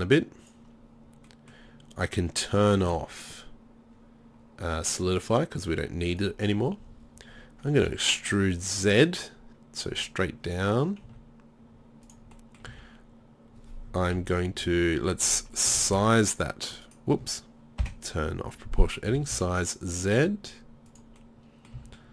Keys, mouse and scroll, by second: 1.1 middle click, 6.3-11.0 drag, 7.8 e, 12.2-14.1 drag, 12.7 z, 14.2 KP_3, 14.6 KP_1, 15.7 s, 17.8 o, 21.3 middle click, 21.5 middle click, 21.7 middle click, 21.8 middle click, 21.8 z.